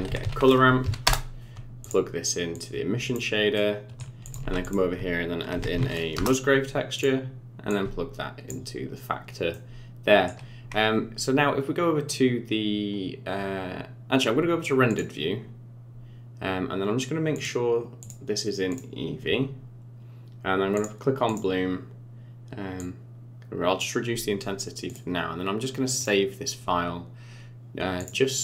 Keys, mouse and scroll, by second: 2.5 click, 3.5 middle click, 4.2 click, 4.4 shift+a, 7.7 click, 9.5 middle click, 15.5 click, 17.3 click, 18.0 click, 20.7 click, 21.2 click, 22.7 click, 24.8 click.